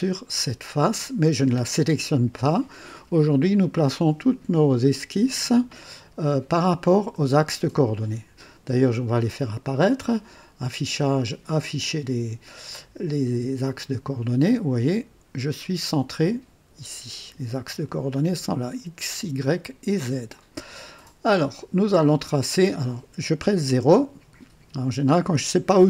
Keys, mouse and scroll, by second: 9.6 click, 11.0 click, 13.6 click, 14.4-16.4 drag, 18.0-19.1 drag, 20.3-21.1 drag, 22.5 click, 23.6 KP_0, 25.0 right click.